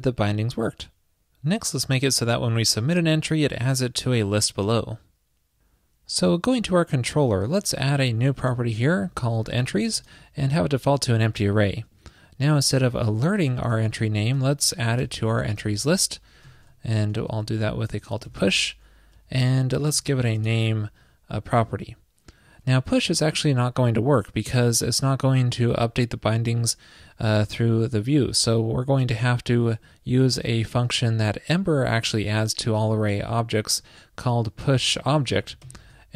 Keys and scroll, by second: 8.2 super+Return, 12.7 alt+Left, 12.8 alt+Left, 13.2 alt+Left, 13.6 alt+Left, 14.6 alt+shift+Right, 17.0 alt+Left, 17.6 alt+Right, 22.5 alt+Left, 22.9 alt+Left, 23.2 alt+Left.